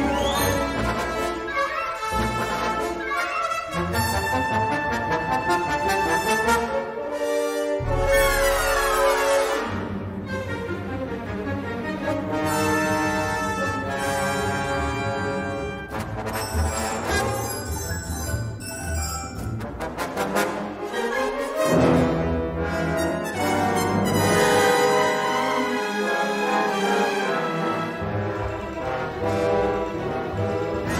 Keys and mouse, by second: 0.1 ctrl+z, 0.8 i, 1.7 e, 2.5 middle click, 3.6 middle click, 5.6-8.5 middle drag, 8.8 a, 10.5 click, 11.6 s, 12.2 g, 14.1 a, 14.3 s, 14.9 g, 17.5 middle click, 18.6 3, 19.0 middle click, 20.2 g, 21.5 shift+click, 22.7 i, 24.4 s, 25.6 e, 26.1 s, 28.7 g, 30.0 2, 30.6 alt+shift+click.